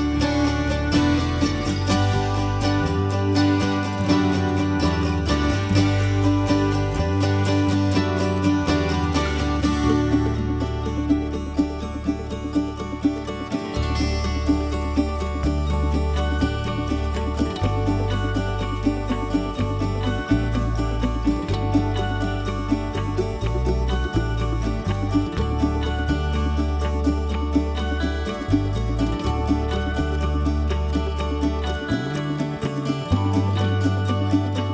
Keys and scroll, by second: 0.2-3.6 typing, 5.4 m, 8.0-9.9 typing, 13.7 m, 15.1 m, 17.0 e, 18.5 space, 19.1 m, 20.4 Escape, 21.2 Escape, 24.4 l, 26.7 6, 26.9 Return, 27.5 7, 27.6 Return, 28.1 m, 30.0 e, 30.7 space, 31.2 m.